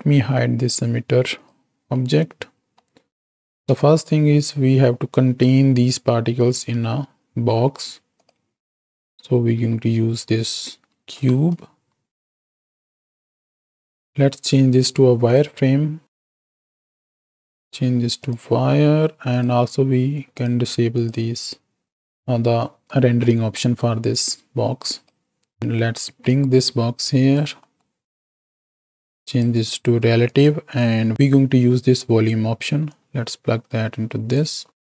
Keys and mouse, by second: 0.5 click, 1.3 click, 1.9-2.7 middle drag, 3.6 KP_1, 6.7 shift+a, 8.8 ctrl+space, 9.7 z, 11.0 shift+Left, 12.8 g, 13.6 click, 13.8 ctrl+space, 16.8 drag, 17.5-18.3 drag, 19.3 click, 20.3 click, 20.9 click, 23.2 middle click, 25.2-26.2 right drag, 26.2 click, 27.7 middle click, 28.4 click, 28.7 click, 30.3 click, 32.9-34.4 drag.